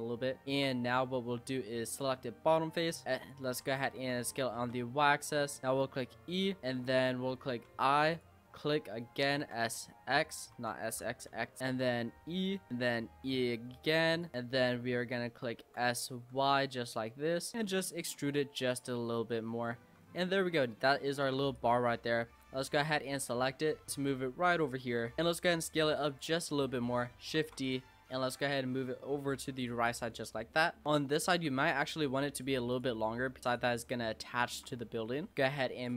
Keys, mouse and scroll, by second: 0.2 shift+middle click, 0.8 scroll up 3, 1.0-1.4 middle drag, 1.4 Tab, 1.9 click, 2.2 middle click, 3.0 s, 3.6 ctrl+z, 4.0 s, 5.6 shift+middle click, 5.8 e, 6.6 scroll up 3, 6.8 middle click, 7.7 i, 9.4 s, 10.5 ctrl+z, 10.9 s, 11.8 e, 13.1 e, 15.6 s, 17.5 e, 18.9 middle click, 19.8 Tab, 20.0 scroll down 5, 20.2 middle click, 20.8-21.2 scroll up 4, 21.2 Tab, 21.5 click, 22.4 l, 23.2 middle click, 23.9 click, 25.1 scroll down 1, 25.2 middle click, 25.3 s, 26.3-27.4 middle drag, 27.4 shift+d, 28.3 click, 29.9 click, 30.1-31.3 middle drag, 31.3 Tab, 31.7 click, 32.3 shift+click, 32.7 shift+click, 33.6 shift+click, 34.4 shift+click, 34.8 middle click, 35.3 click.